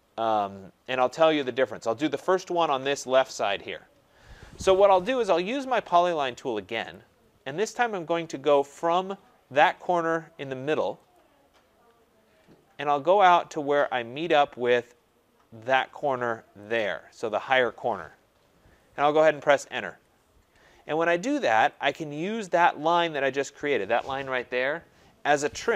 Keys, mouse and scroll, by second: 1.0 right click, 2.5 middle click, 4.6-5.9 scroll, 6.9 click, 7.7-9.5 scroll, 11.1 click, 11.4-12.0 scroll, 12.7-13.0 scroll, 13.4-14.0 scroll, 16.7 click, 19.8 Return, 21.9 click, 23.1 click.